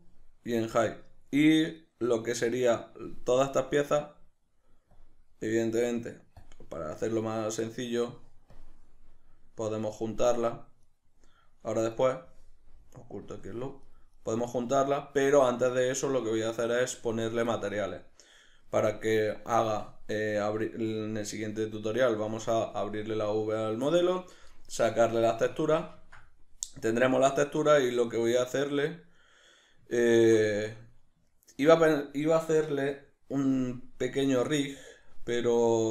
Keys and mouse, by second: 0.6-1.8 middle drag, 1.8 right click, 3.4-10.9 drag, 10.9 right click, 11.9 right click, 13.3-13.9 drag, 13.9 right drag, 14.1 right drag, 14.5 right drag, 14.8 right click, 17.6-20.4 middle drag, 20.4-25.3 drag, 25.3-35.9 middle drag.